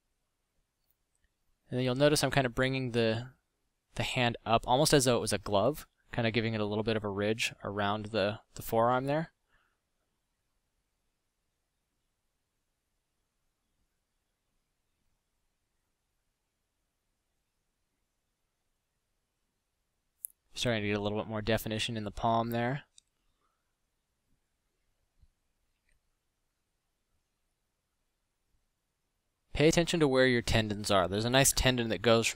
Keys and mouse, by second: 10.9 f, 24.7 f, 25.1 f.